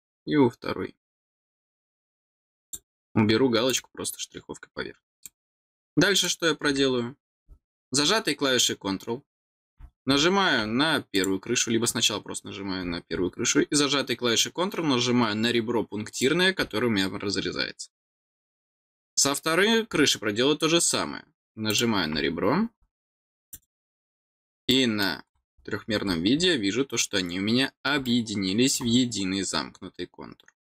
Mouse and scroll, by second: 1.8 middle click, 2.6 click, 3.7 click, 5.1 click, 6.1 click, 11.1 click, 16.1 click, 19.1 click, 21.7 click, 23.3 click, 23.5 click, 24.4 scroll down 1, 24.7 middle click, 25.2-26.4 scroll down 4, 28.0 middle click, 29.3-30.4 scroll down 3.